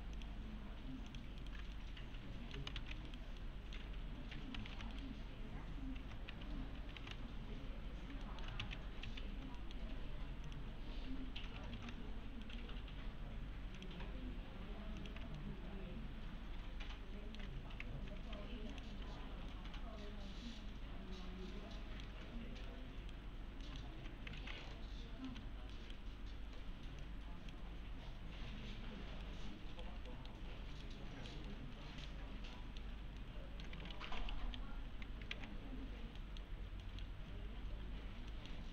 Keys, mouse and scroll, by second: 0.2 click, 1.4 right click, 1.8-2.7 alt+middle click, 2.8 ctrl+z, 3.1 right click, 3.4-4.0 alt+middle click, 3.8 1, 4.7 ctrl+a, 4.9 right click, 6.3 1, 7.0 ctrl+a, 8.2 alt+middle click, 8.6 ctrl+z, 9.6 middle click, 10.5 click, 11.1 1, 11.8 ctrl+a, 12.4 right click, 13.8 click, 15.4-17.6 alt+middle click, 17.5 1, 18.7 click, 19.5-22.3 alt+middle click, 22.7-23.3 right click, 23.6 middle click, 24.2 scroll down 1, 24.4 w, 25.3 s, 25.7 right click, 27.0-27.6 click, 29.2-29.9 right click, 30.1 middle click, 30.5-30.8 scroll up 1, 30.8-31.5 right click, 31.5-32.1 middle click, 33.2-33.8 alt+middle click, 33.8-34.9 typing, 34.9 scroll down 1, 35.3 alt+x, 35.9-36.2 scroll up 1, 36.2 middle click, 38.0-38.3 scroll up 1, 38.3 middle click.